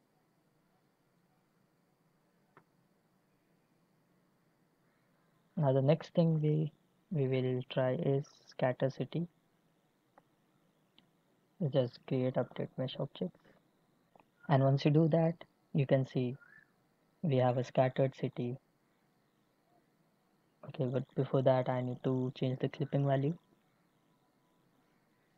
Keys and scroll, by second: 0.5 x, 22.5 n.